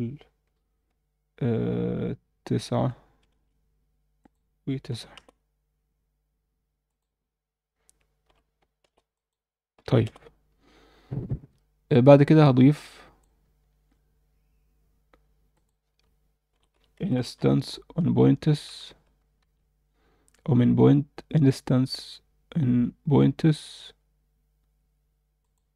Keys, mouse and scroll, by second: 4.2 click, 6.9-8.9 drag, 9.1 click, 12.7 click, 13.6 shift+a, 19.4 shift+a.